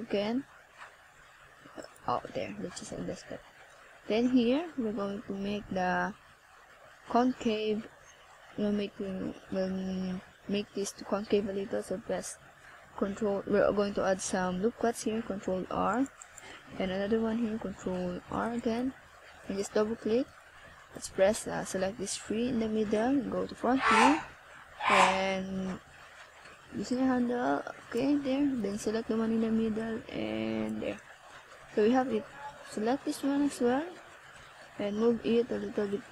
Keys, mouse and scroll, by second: 1.0 click, 1.5 click, 2.8 ctrl+s, 4.0 right click, 13.8 click, 14.9 click, 15.8 click, 22.2 ctrl+z, 22.5 ctrl+z, 25.5 click, 26.7 click, 35.6-36.1 scroll down 4.